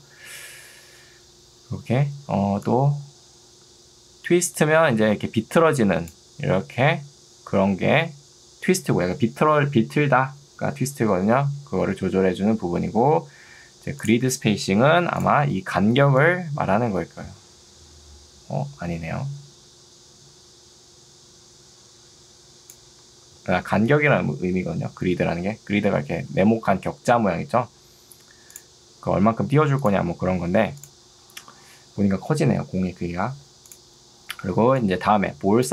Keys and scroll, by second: 7.9 ctrl+z, 23.3 ctrl+z, 34.5 ctrl+2.